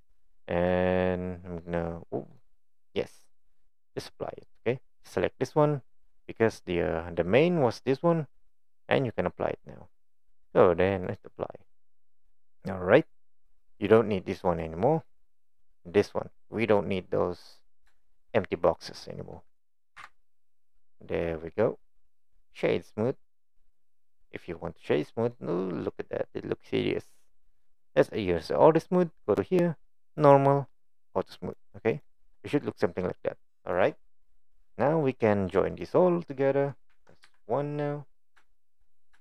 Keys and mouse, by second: 2.4-2.9 middle drag, 2.9 click, 3.2 middle click, 5.0-7.8 drag, 10.3-11.2 drag, 12.4 middle drag, 12.6 click, 13.8 click, 14.5 click, 15.0 click, 16.9-17.5 middle drag, 18.0 shift+middle click, 20.0 Delete, 21.0-21.5 middle drag, 22.0 click, 25.3-26.8 middle drag, 30.2 click, 31.4 click, 32.0 click, 32.3-32.7 middle drag, 35.9 click, 36.9 KP_1, 37.3 KP_3, 38.5 shift+middle drag.